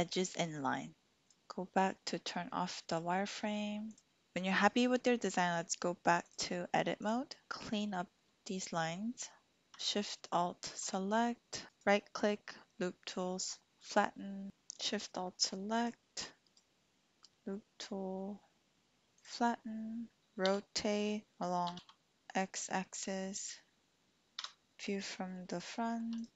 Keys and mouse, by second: 1.2-4.0 drag, 6.3 click, 7.9 shift+click, 10.2 alt+shift+click, 13.9 typing, 14.7 alt+shift+click, 15.8 alt+shift+click, 16.5-19.6 drag, 19.2-20.4 typing, 19.6 middle click, 21.7 y, 22.1 x, 24.4 KP_1, 25.7 shift+click, 26.2 click.